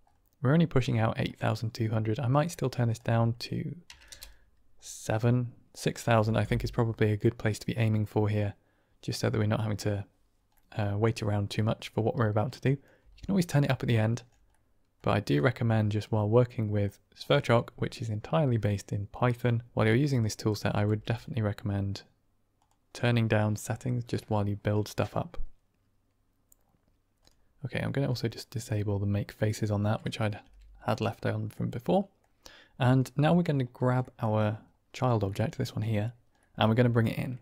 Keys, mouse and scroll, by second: 1.2 click, 2.3 click, 2.8-5.0 drag, 10.4-10.9 middle drag, 11.1-11.4 middle drag, 12.7 click, 12.9 typing, 14.5 middle click, 15.4 drag, 16.0 click, 20.2 drag, 20.8 g, 27.1 click, 28.0 click, 29.3 middle click, 30.1 click, 30.9 g, 31.4-32.1 drag, 33.1 click, 33.9 shift+drag, 35.2-35.9 drag, 36.4 click, 36.8 click, 37.3 shift+a.